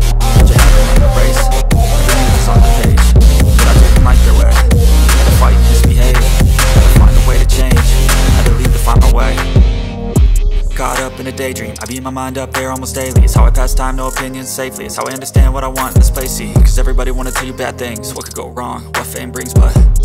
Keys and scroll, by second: 1.1 Delete, 2.9 BackSpace, 4.0 ctrl+space, 7.5 l, 8.1 Escape, 15.5 F2, 17.8 Escape.